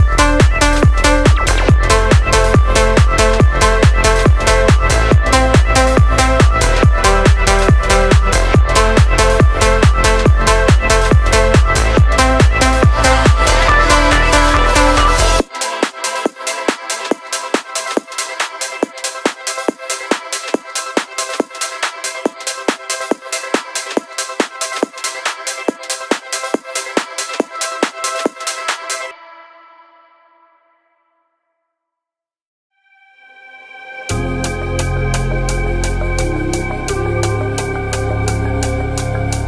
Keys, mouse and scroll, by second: 5.1 click, 5.6 click, 8.4-10.7 drag, 14.4 click, 15.0-16.7 drag, 28.0 space, 30.2-30.7 drag, 31.5 space, 33.2 click, 38.9 space.